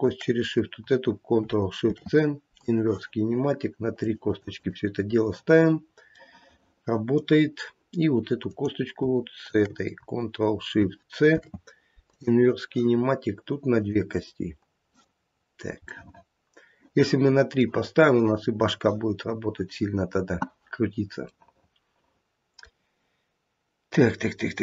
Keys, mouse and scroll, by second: 1.8 ctrl+shift+c, 3.9 click, 4.2 click, 4.6 click, 5.7 scroll down 3, 6.1 middle click, 6.9 middle click, 7.4 scroll up 1, 8.4 click, 8.4 scroll up 1, 9.4 shift+click, 11.3 ctrl+shift+c, 13.7 click, 14.0 click, 15.3-15.7 scroll down 2, 15.9 middle click, 16.5 middle click, 17.1 middle click, 17.5 middle click, 19.3 scroll up 1, 21.3 middle click, 22.5 middle click, 24.3 scroll down 1.